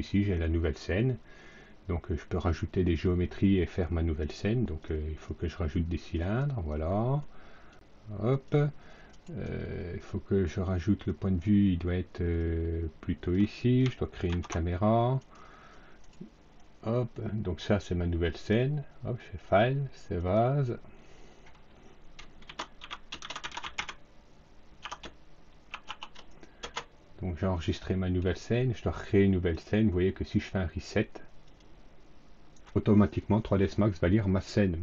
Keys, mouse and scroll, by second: 2.1 click, 3.6 click, 4.6 click, 5.2 click, 6.1 click, 7.1 click, 8.2 click, 9.0 right click, 11.0 click, 12.3 click, 14.2 ctrl+c, 15.1 right click, 15.9 right click, 18.2 click, 20.1 click, 22.1-24.2 typing, 25.4-26.3 typing, 26.5 Return, 29.4 click, 30.2 click, 31.4 click.